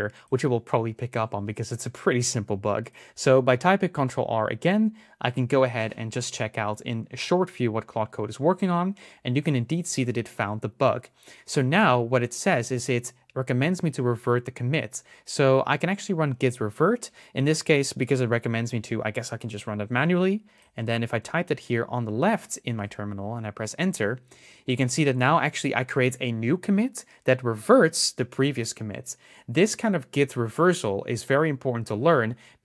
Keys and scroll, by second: 4.2 ctrl+r, 19.8 super+c, 21.0 super+v.